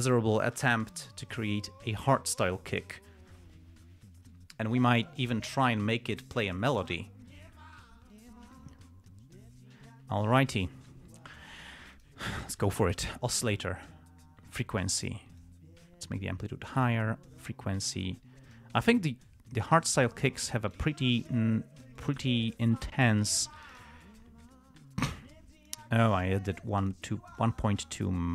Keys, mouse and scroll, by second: 0.1 click, 1.2 right click, 5.0 click, 5.8 click, 7.2 click, 7.7 click, 8.5 click, 12.3 click, 14.9 click, 15.8-17.3 drag, 18.1 click, 19.3-20.2 drag, 20.7 click, 21.5-22.7 drag, 24.3-26.2 drag, 27.1 click, 27.7 click.